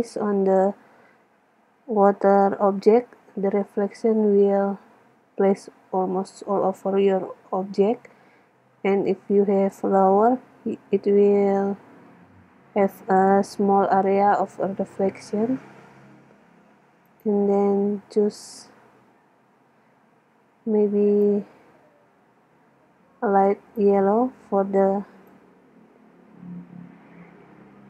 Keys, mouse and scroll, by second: 17.3-19.0 drag.